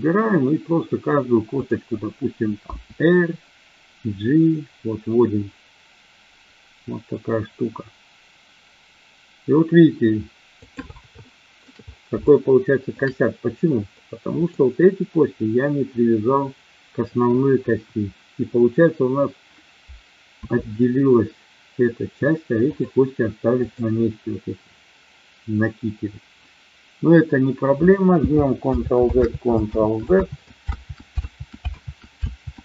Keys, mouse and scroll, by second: 1.5-2.3 drag, 2.6 r, 11.2-11.6 shift+middle drag, 12.2-12.8 shift+middle drag, 13.8-14.5 middle drag, 17.6 KP_1, 20.3 r, 22.7 click, 23.6-24.5 drag, 28.6 ctrl+z, 29.2 ctrl+z, 29.7 ctrl+z, 31.1 ctrl+z, 31.7 ctrl+z, 32.2 ctrl+z.